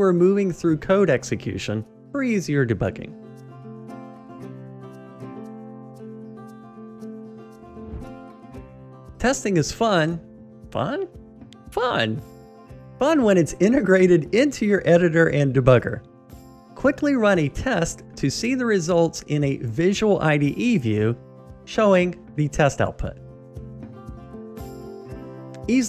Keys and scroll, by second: 1.7 alt+super+r, 3.4 alt+super+r, 3.6 F7, 25.4 ctrl+shift+r.